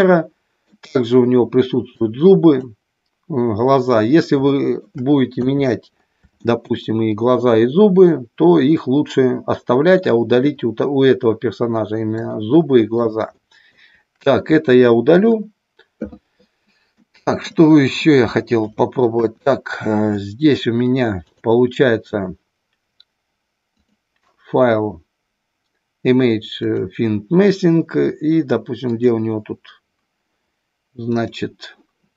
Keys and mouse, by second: 0.0-0.6 middle drag, 2.0-2.7 drag, 4.6 shift+middle drag, 5.2 KP_3, 6.4 shift+middle click, 10.0-10.3 shift+middle drag, 12.3-12.9 shift+middle drag, 13.3 shift+middle click, 15.1 Delete, 17.0 middle click, 18.0 middle click, 19.1 KP_1, 20.1 shift+middle click, 21.2 click, 23.7-27.1 drag, 31.1 click.